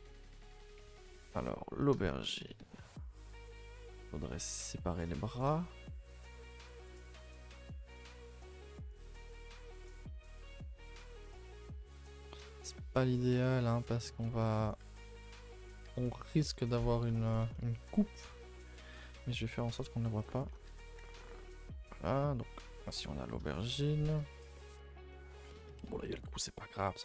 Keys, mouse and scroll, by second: 0.2-1.8 middle drag, 1.8 click, 2.1 shift+middle click, 2.3 scroll up 2, 2.5 a, 2.6 a, 2.7-4.5 middle drag, 4.5 alt+click, 4.7 middle click, 5.4 alt+shift+click, 5.6-6.9 middle drag, 6.9 alt+shift+click, 7.1-8.3 middle drag, 8.3 alt+shift+click, 8.4-9.7 middle drag, 9.7 right click, 9.9 middle click, 10.2 a, 10.4 a, 11.1-13.4 middle drag, 13.4 alt+Left, 13.7-14.7 middle drag, 14.7 alt+shift+Left, 14.9-16.4 middle drag, 16.4 alt+shift+Left, 16.7 alt+shift+Left, 17.5-18.8 middle drag, 18.8 alt+shift+click, 19.0-20.2 middle drag, 20.2 right click, 20.5 scroll down 2, 20.6 a, 20.8 a, 22.0-23.8 middle drag, 23.8-24.1 scroll up 2, 24.1 middle click, 24.7-25.1 scroll up 2, 25.1 middle click, 26.0-26.6 scroll down 4, 26.6-27.0 middle drag.